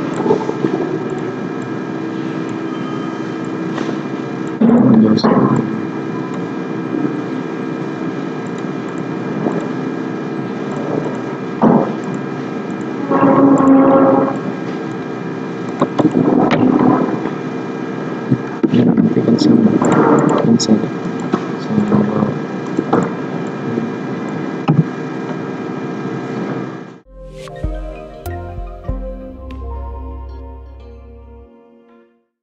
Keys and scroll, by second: 18.8 ctrl+z.